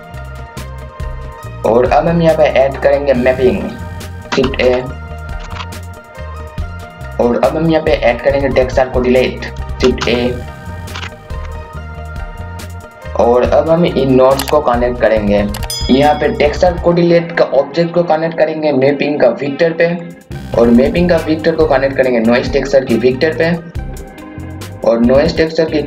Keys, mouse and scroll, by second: 4.4-6.0 typing, 4.8 click, 5.9 click, 6.3 scroll up 1, 6.7 click, 9.8-11.8 typing, 10.5 click, 11.6 click, 15.8 scroll up 1, 16.4-25.8 drag.